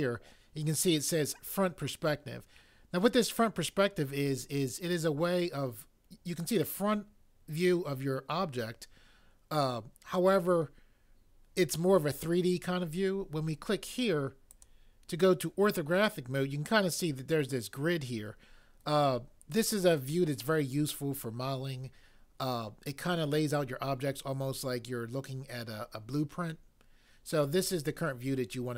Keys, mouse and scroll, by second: 14.5 click.